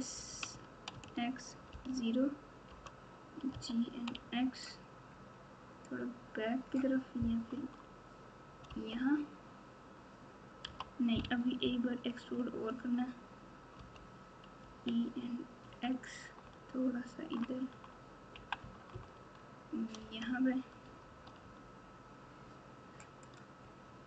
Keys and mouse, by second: 0.4 s, 3.5 g, 10.6 g, 14.6 e, 20.8 Tab, 21.2 Tab, 23.2 click.